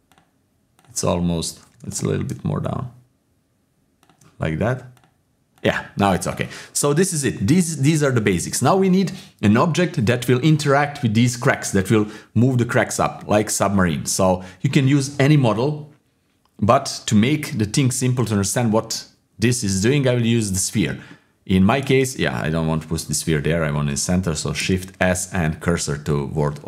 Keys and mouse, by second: 1.7 g, 4.9 click, 5.5-6.8 drag, 6.8 middle click, 7.9 middle click, 14.0-17.3 middle drag, 18.0 shift+a, 21.1-21.6 middle drag, 22.0 ctrl+z, 22.3-23.0 middle drag, 24.5 shift+s.